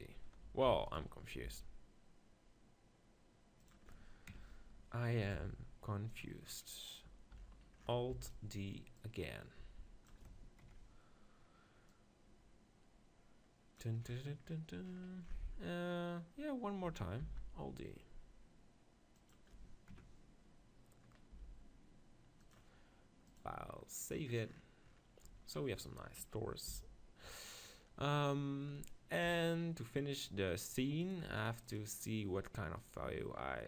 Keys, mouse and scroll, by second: 0.8 alt+d, 1.5 g, 1.7-2.9 right drag, 3.7-5.5 drag, 5.5 g, 6.2-8.0 drag, 8.0 middle click, 8.1 alt+d, 8.3-10.2 right drag, 9.1-10.9 drag, 11.9-13.7 drag, 14.1-16.6 middle drag, 17.2 alt+d, 17.6-18.6 middle drag, 19.3-21.0 drag, 21.0-22.2 middle drag, 21.4 g, 22.5-25.3 drag, 26.2 KP_0, 26.7 z, 29.2 KP_7, 31.0-33.5 drag, 32.8-33.6 right drag.